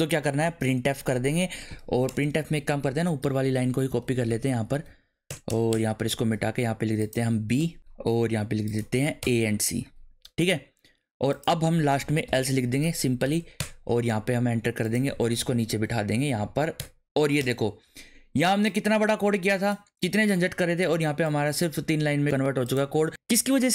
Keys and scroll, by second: 0.0-1.0 typing, 2.1 BackSpace, 3.4 Up, 4.0 alt+shift+Down, 4.9 Down, 5.3 BackSpace, 7.6 BackSpace, 9.2 BackSpace, 9.3 a, 11.7-13.2 typing, 13.6 Return, 15.5 alt+shift+Down, 16.4 Down, 16.8 \, 16.8 BackSpace, 17.4 BackSpace.